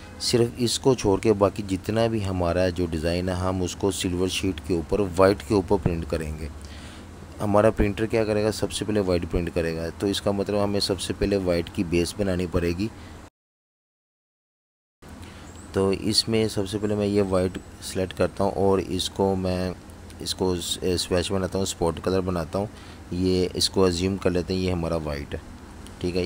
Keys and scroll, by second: 2.1 super+3, 6.0 super+z, 12.3 super+3, 20.5-21.7 typing.